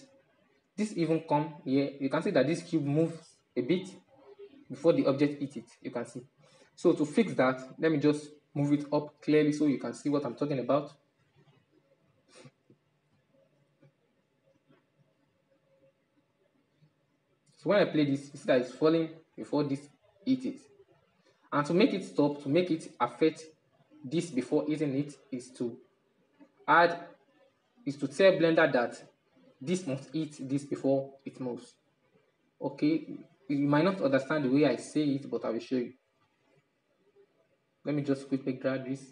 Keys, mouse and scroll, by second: 2.5 Right, 2.8 Right, 3.0 Right, 3.2 Right, 3.4 Right, 4.0 Right, 4.2 Right, 4.7 Right, 5.6-5.9 Left, 6.2 Left, 7.1-7.4 shift+middle drag, 7.4-7.9 scroll down 6, 7.9-10.1 middle drag, 10.1 right click, 11.1-12.0 drag, 12.0-12.9 shift+middle drag, 12.9-24.8 drag, 24.8-25.8 middle drag, 25.8-27.2 drag, 27.2-30.3 middle drag, 30.7-32.6 middle drag, 32.6-39.1 drag.